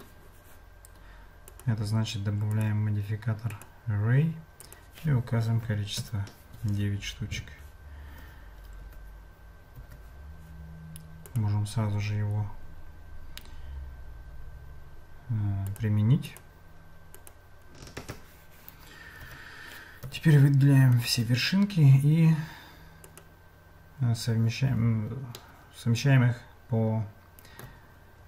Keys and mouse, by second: 1.5 click, 2.5-3.7 drag, 4.6-6.6 drag, 8.8 Tab, 9.8 Tab, 11.2-15.8 drag, 16.2-17.3 drag, 19.2 Tab, 20.0 a, 20.9-23.2 right drag, 25.4-27.7 shift+middle drag.